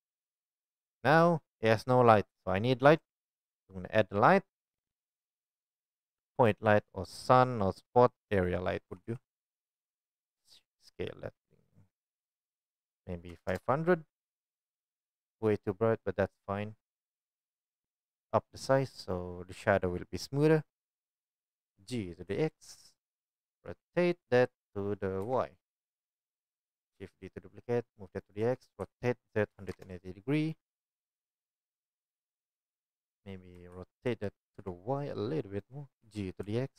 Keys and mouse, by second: 0.6-1.5 shift+drag, 3.1 shift+a, 3.3-3.8 drag, 8.9 g, 10.1 s, 11.7 drag, 12.6-16.6 drag, 13.6 KP_0, 21.5 g, 23.3-26.4 drag, 23.5 r, 26.5 shift+d, 26.6 right click, 27.4 right click, 27.9-36.7 right drag, 28.4 r, 33.5 r, 36.0 g.